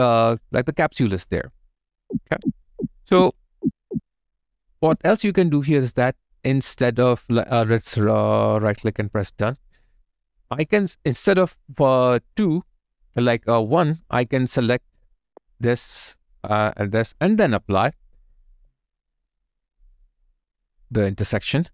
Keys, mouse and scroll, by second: 0.1 alt+click, 0.6 alt+middle click, 1.9 ctrl+z, 7.2 ctrl+z, 7.2 right click, 10.6 double click, 15.1 shift+click, 18.6 alt+right click, 19.1 alt+middle click, 19.6 right click.